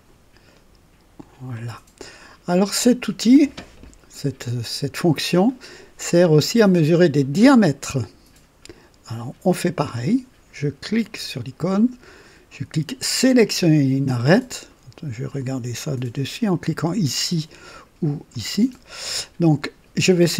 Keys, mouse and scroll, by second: 1.1 click, 11.0 click, 13.4 click, 15.2 click, 18.2 click.